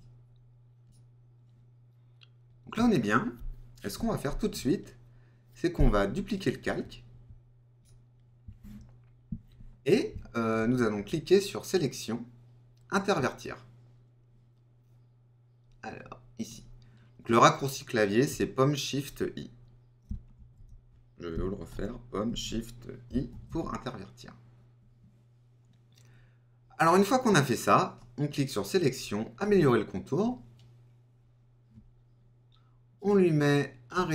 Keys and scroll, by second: 20.3 super+z.